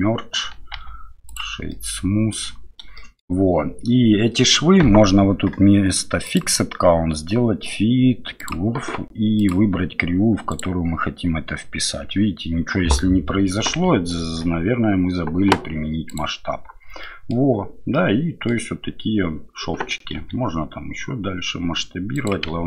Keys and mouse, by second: 0.7 q, 1.7-2.3 middle drag, 2.9 shift+middle drag, 6.2-13.8 drag, 14.2 ctrl+a, 17.0 middle drag, 17.9-18.5 middle drag.